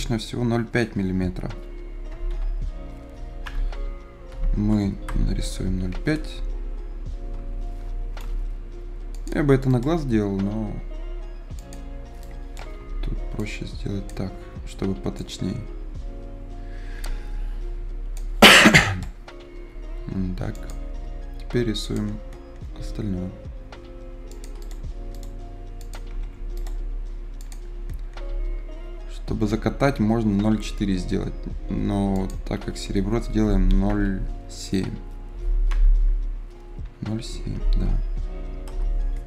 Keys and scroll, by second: 2.2 ï, 3.4 BackSpace, 3.5 s, 4.2 e, 5.0 Return, 12.7 F10, 19.9 Escape, 34.0 i, 35.6 BackSpace, 36.7 s, 37.4 g, 38.6 Return.